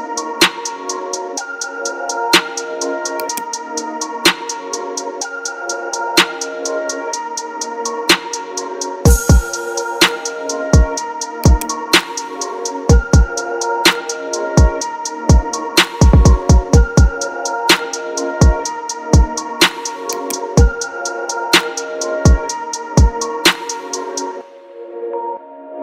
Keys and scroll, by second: 5.3 ctrl+Delete, 7.3 alt+Delete, 15.6 Return, 18.9 ctrl+KP_Subtract, 19.8 space, 22.3 ctrl+KP_Subtract.